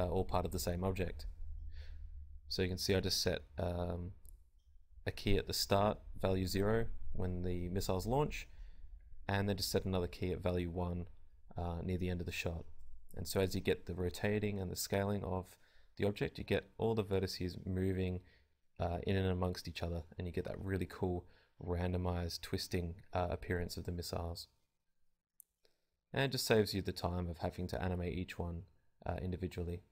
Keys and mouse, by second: 0.6-2.4 right drag, 6.9 alt+a, 15.2 click, 16.3 click, 19.7 alt+a.